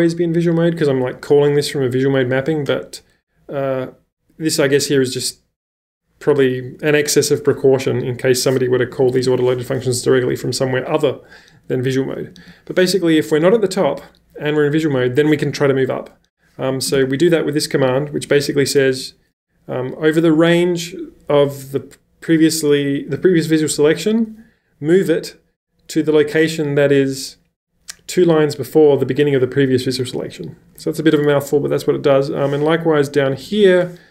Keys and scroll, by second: 8.6 Escape, 8.8 Escape, 8.9 j, 9.1 j, 9.2 j, 12.3 j, 12.4 j, 16.6-18.9 typing, 19.9 w, 22.3-24.2 typing, 32.9-33.9 typing.